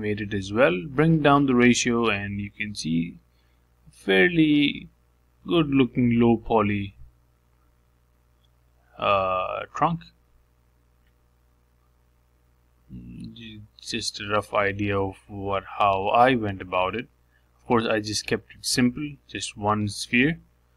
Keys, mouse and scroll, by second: 0.0 click, 1.0-3.0 drag, 7.1-8.7 middle drag, 8.7 click, 9.4 g, 10.8 g, 12.4 middle click, 13.3 g, 14.7-15.8 middle drag, 15.8-16.6 scroll down 1, 16.6 shift+d, 19.4 s.